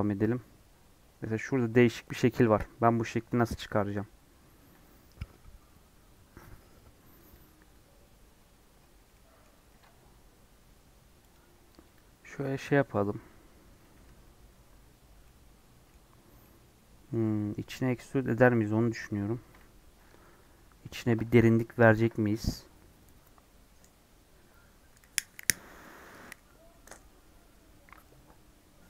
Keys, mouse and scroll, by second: 2.0 middle click, 2.4 click, 3.1 Tab, 8.3 scroll up 1, 9.0 scroll up 1, 9.0 middle click, 9.6 ctrl+r, 13.9 3, 15.2-28.8 middle drag.